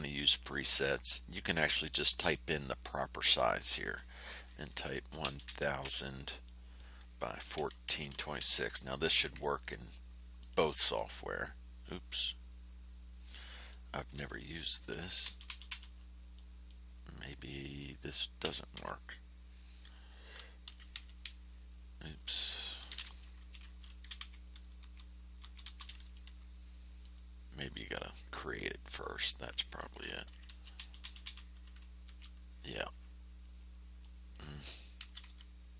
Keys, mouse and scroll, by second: 2.3 click, 3.4 click, 4.9 KP_1, 5.2 KP_0, 7.5 KP_1, 7.8 KP_4, 8.1 KP_2, 8.3 KP_6, 10.3 click, 13.6 click, 14.9 KP_1, 15.2 KP_0, 16.3 click, 18.4 KP_1, 18.7 KP_4, 20.6 KP_2, 20.9 KP_6, 23.3 Home, 24.1 Delete, 24.7 Return, 27.0 click, 29.3 click, 30.4 KP_1, 30.7 KP_0, 32.0 KP_Enter, 34.0 click, 34.9 KP_1, 35.2 KP_4.